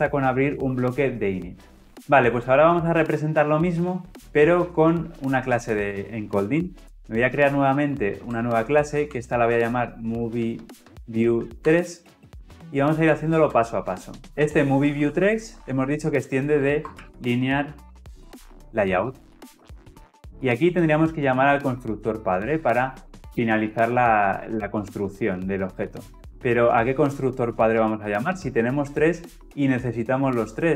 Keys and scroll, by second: 0.5 Return, 6.8 alt+Insert, 19.0 Return.